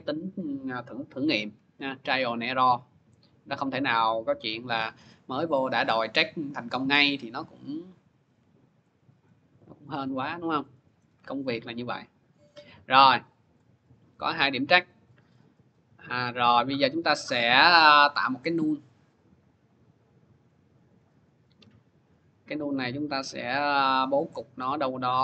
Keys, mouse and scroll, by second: 1.2 Page_Down, 4.5 click, 5.7 scroll, 7.3 middle click, 7.6 click, 9.1 middle click, 9.7 middle click, 10.2 scroll, 10.9-11.6 scroll, 12.7 middle click, 13.4 click, 14.6 click, 15.2 middle click, 16.9-18.1 scroll, 18.2 click, 19.1 click, 20.7 click, 23.0 click, 23.5 middle click, 23.6 middle click, 24.5 middle click, 24.5 scroll.